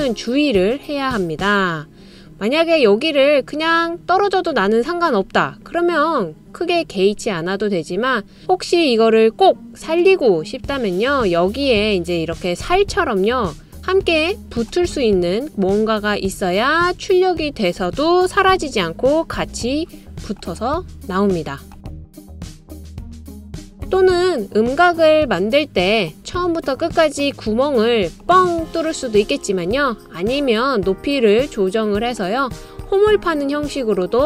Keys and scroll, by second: 18.9-19.7 typing, 27.4 typing.